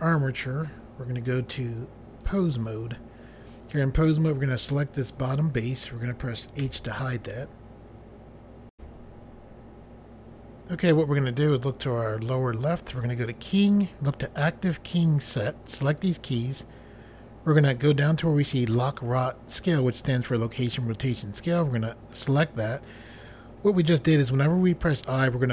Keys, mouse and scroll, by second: 1.2 click, 2.2 click, 4.3 click, 6.6 h, 8.7 Pause, 13.0 click, 15.8 click, 21.6 click, 22.9 click.